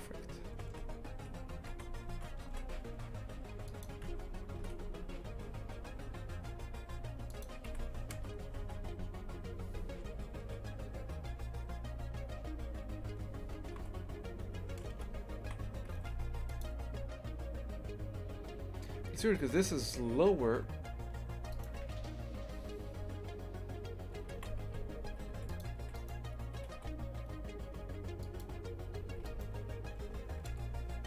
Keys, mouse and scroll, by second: 0.0 Tab, 0.7 ctrl+a, 2.1 Tab, 3.8 ctrl+a, 4.1 Tab, 4.6 ctrl+b, 8.2 KP_0, 8.6 Tab, 13.8 ctrl+z, 14.4 ctrl+z, 14.9 KP_0, 15.5 shift+f, 21.5 right click, 24.4 shift+f, 25.8 3, 26.0 right click, 26.6 g, 29.2 2, 29.3-30.5 right drag, 30.5 KP_0.